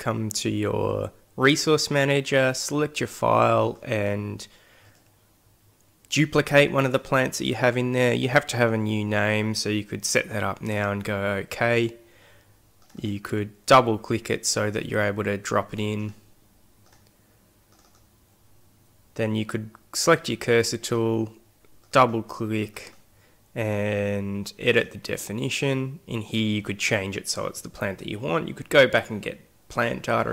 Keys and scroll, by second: 18.6 x.